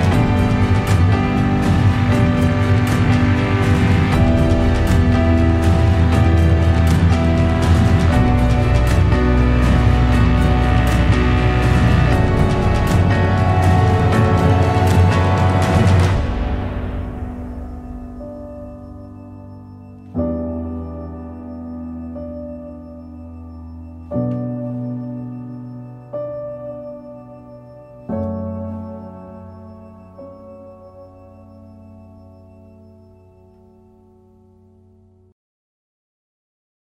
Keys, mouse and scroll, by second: 12.8 click, 17.3-19.2 drag, 22.0-25.3 drag, 30.7 click, 31.5-34.5 scroll up 5, 34.5 scroll up 1, 34.6-36.9 drag.